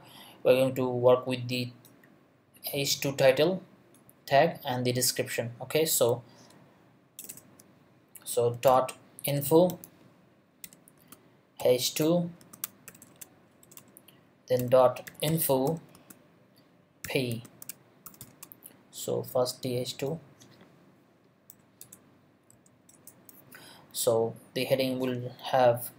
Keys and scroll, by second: 7.2 Return, 8.7-13.0 typing, 13.6 shift+Return, 14.6-18.2 typing, 21.5 Return, 21.8 BackSpace, 22.5 Left, 22.9 Return.